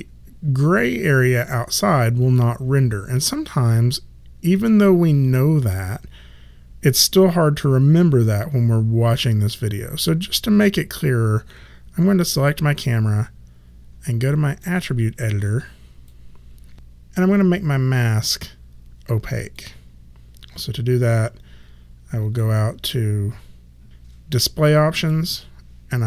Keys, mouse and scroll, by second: 12.3 click, 14.6 click, 19.5 click, 23.8 click, 24.9 click.